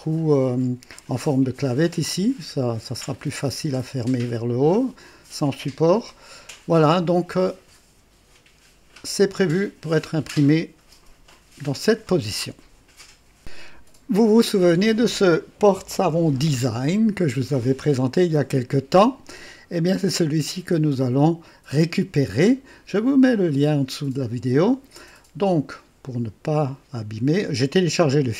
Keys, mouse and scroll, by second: 5.7-7.9 drag, 13.4 click, 21.1-23.0 drag.